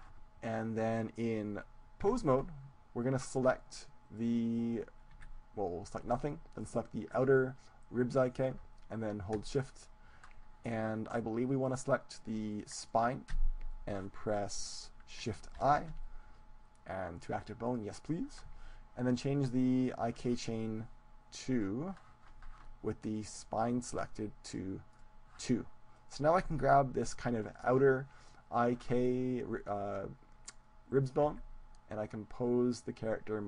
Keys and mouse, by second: 2.0 Tab, 4.4-6.0 right drag, 5.1 a, 6.4 a, 6.7-8.6 right drag, 12.8-14.7 right drag, 15.6 shift+i, 21.6-24.0 drag, 23.1-25.6 right drag, 24.4-26.7 drag, 26.1-29.1 right drag, 31.4 g.